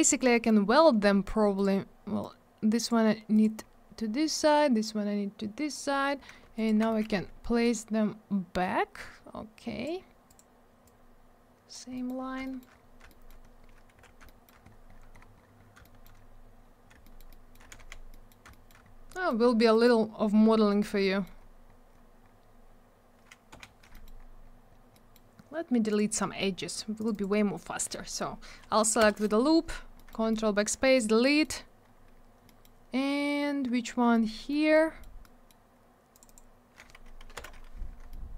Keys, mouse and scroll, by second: 0.1 scroll down 1, 0.3 middle click, 0.4 middle click, 1.5 click, 1.6 click, 2.2 click, 3.3 click, 3.4 click, 3.5 scroll up 1, 4.3 click, 6.5 ctrl+click, 6.6 ctrl+click, 6.8 middle click, 7.0 double middle click, 7.6 click, 10.2 click, 10.3 click, 10.8 click, 11.9 middle click, 12.0 middle click, 12.2 scroll down 1, 12.4 alt+middle click, 12.5 alt+middle click, 12.7-13.0 scroll up 1, 13.0 alt+middle click, 13.2 alt+middle click, 13.4 scroll down 1, 13.9 z, 14.6 scroll down 1, 16.5-16.9 scroll down 1, 17.0 alt+middle click, 17.1 alt+middle click, 17.3 middle click, 17.7 alt+w, 18.1 middle click, 18.2 middle click, 18.5 alt+middle click, 18.6 alt+double middle click, 18.8 scroll up 1, 19.1 middle click, 19.2 middle click, 19.4 scroll up 1, 19.7 middle click, 19.8 middle click, 20.0 scroll up 1, 20.2-20.5 scroll down 1, 20.8 middle click, 23.5 F4, 23.9 middle click, 24.0 middle click, 24.1-24.4 scroll up 1, 24.9 middle click, 25.1 middle click, 25.9 click, 25.9 click, 27.1 click, 27.2 click, 29.0 ctrl+BackSpace, 29.7 scroll down 1, 29.9 middle click, 30.3 alt+middle click, 30.8 scroll down 1, 31.2 middle click, 31.4 middle click, 31.6 scroll up 1, 32.4 middle click, 32.6 middle click, 34.1 alt+middle click, 34.7 middle click, 35.2 middle click, 36.1 click, 36.2 click, 36.2 click, 36.3 double click, 37.3 shift+j, 38.1 alt+middle click.